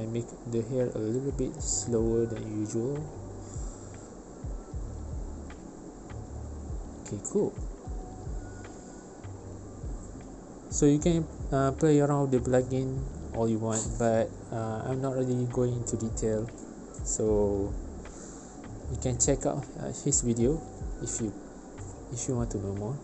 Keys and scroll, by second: 0.1 2, 0.3 Return, 3.3 space, 4.6 space, 7.2 space, 12.6 ctrl+space, 13.1 v, 16.3 space, 18.0 space, 22.9 space.